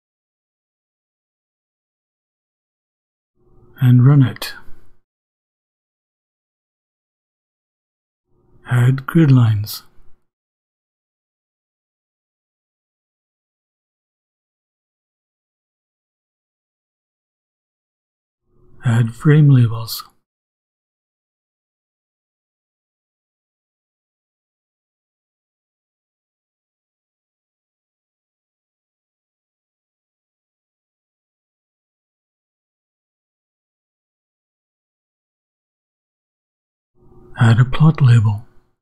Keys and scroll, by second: 0.0-3.5 typing, 3.7 shift+Return, 8.2-13.9 typing, 8.8 Return, 14.4 shift+Return, 16.6 ,, 17.3 Return, 17.8-26.0 typing, 21.5 Return, 26.5 shift+Left, 27.0 shift+Left, 27.4 shift+', 29.4-32.7 typing, 33.2 shift+Return, 36.6-38.8 typing, 36.9 Return.